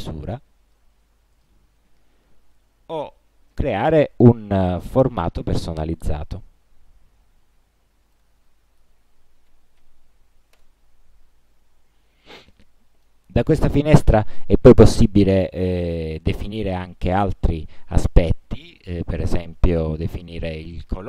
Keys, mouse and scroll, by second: 1.5 click, 3.7 click, 5.1 Left, 5.4 Down, 8.3 click, 9.0-10.5 typing, 10.7 Return, 12.7 click, 19.1 click.